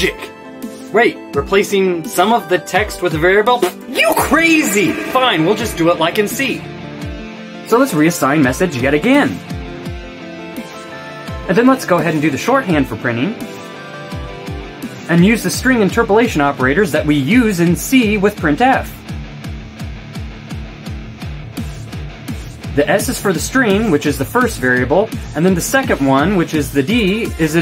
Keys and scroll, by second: 7.3 Return, 8.6-22.7 typing, 24.1 shift+', 25.3-27.6 typing.